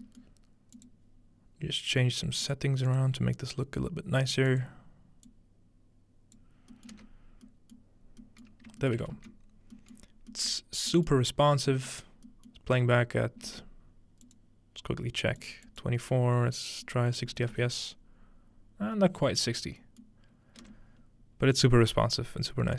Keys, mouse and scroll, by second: 0.2 middle click, 0.8-2.6 drag, 2.9 click, 4.5 click, 5.3-6.4 drag, 6.9 space, 8.0-9.3 scroll down 2, 9.2 z, 11.9-13.5 scroll up 2, 13.5 space, 14.3 click, 15.4 click, 15.7 click, 16.9 click, 17.2-19.1 scroll up 2, 17.3 middle click, 17.5 space, 19.7-21.3 scroll down 2, 19.8-21.6 middle drag, 21.6-22.7 drag.